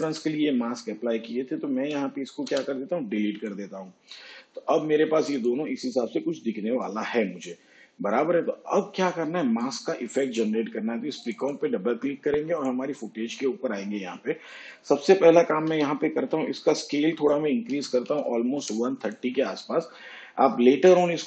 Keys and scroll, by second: 2.4 Delete, 15.7 s, 17.7 1.